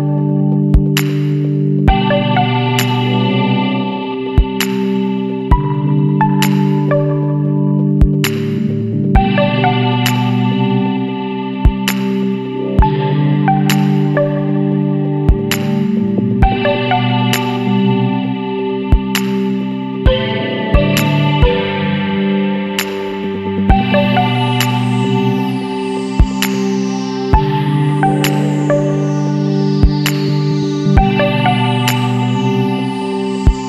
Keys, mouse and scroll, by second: 0.3 click, 2.7 click, 4.4 click, 7.3 click, 7.8 click, 8.9 click, 10.5 click, 12.2 click, 13.4 click, 14.8 click, 15.5 KP_0, 16.2 click, 17.1 click, 18.4 KP_1, 19.4 click, 20.4 click, 21.2-21.5 scroll down 2, 23.7 click, 24.6 KP_1, 24.8 KP_5, 27.3 click, 31.2 click.